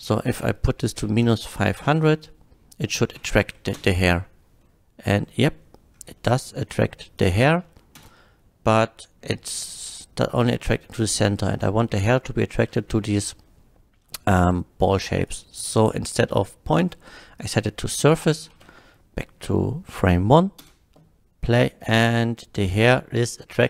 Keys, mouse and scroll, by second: 0.4 KP_Subtract, 1.0 KP_5, 1.3 KP_0, 1.8 Return, 1.8 KP_0, 3.4 shift+Left, 3.7 space, 4.6 shift+Left, 4.6-5.6 middle drag, 5.6-6.9 middle drag, 7.1 click, 7.7 shift+middle click, 8.0 space, 10.3 middle drag, 11.6 middle drag, 12.7 shift+middle drag, 15.2 shift+click, 17.4 click, 17.9 middle drag, 18.6 shift+click, 20.6 space, 22.1-23.6 middle drag.